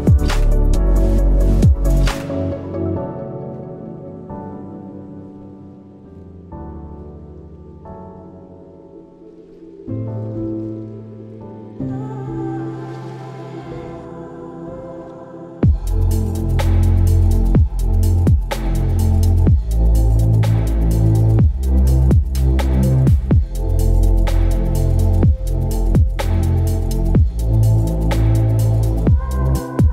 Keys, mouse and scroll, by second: 10.5 double click, 13.3 alt+click.